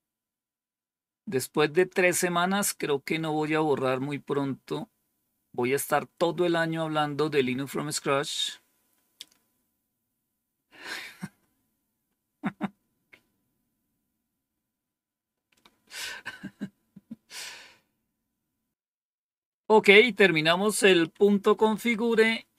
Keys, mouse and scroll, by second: 0.6-1.3 scroll down 2, 3.5-11.6 scroll up 2, 11.6-13.1 scroll up 1, 13.1-13.8 scroll down 2, 20.3 click, 21.1 Up, 21.7 Down.